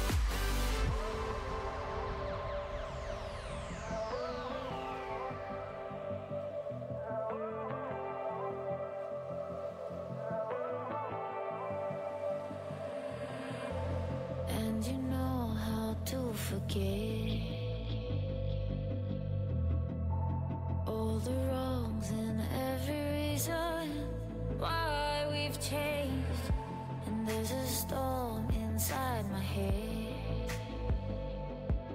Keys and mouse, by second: 2.1 ctrl+z, 2.7 ctrl+z, 4.3-10.3 drag, 10.8 Tab, 12.6 Tab, 14.2 ctrl+r, 16.2 Tab, 23.8 Tab, 24.4 Tab, 31.2-31.9 drag.